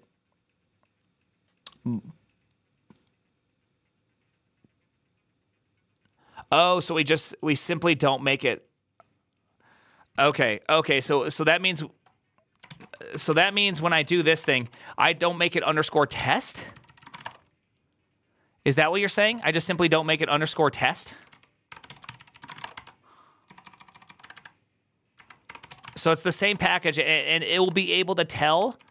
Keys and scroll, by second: 12.9-28.0 typing, 13.8 ctrl+n, 14.0 ctrl+c, 26.9 ctrl+u, 27.1 ctrl+c, 28.4 ctrl+d, 28.6 ctrl+d.